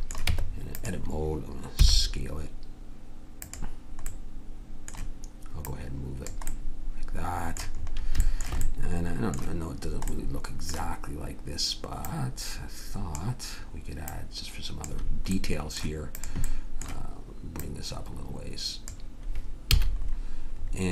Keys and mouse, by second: 0.2 Tab, 1.7 s, 4.1-5.3 drag, 5.6-7.8 drag, 12.0-13.9 drag, 14.1-15.5 drag, 15.5 right click, 15.7 click, 19.6 a.